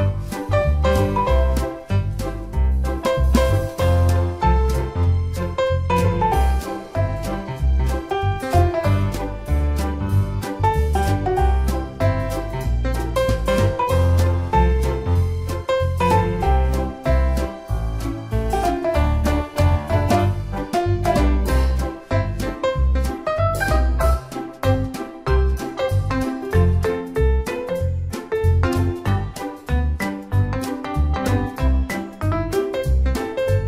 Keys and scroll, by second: 13.9 ctrl+d.